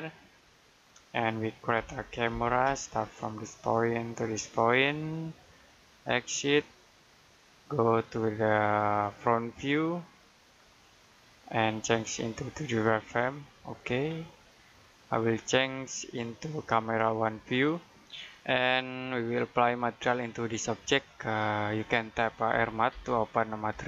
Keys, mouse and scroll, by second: 1.6 c, 2.5 space, 3.4 click, 13.9-14.3 scroll up 1, 14.3-14.9 scroll down 1, 14.9 middle click, 16.0 click, 18.9-19.2 scroll down 1, 19.2 middle click, 22.4-22.8 typing.